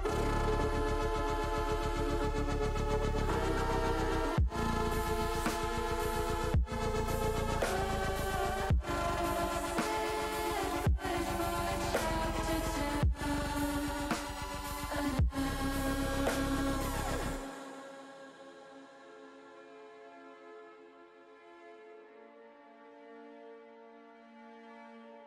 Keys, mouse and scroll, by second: 3.2-4.6 shift+middle drag, 5.5 click, 9.6 click, 11.1-13.0 drag, 15.0-19.9 drag, 22.6 click, 24.3 middle click, 24.7 middle click.